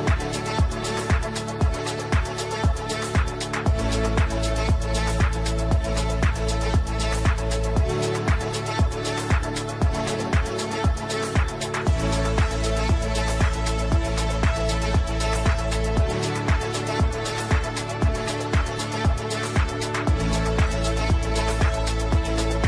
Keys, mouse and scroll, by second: 0.1-0.5 scroll, 0.7 click, 5.4 shift+click, 6.1-6.6 typing, 7.9 click, 9.6-20.8 drag, 20.8 right click, 22.3 click.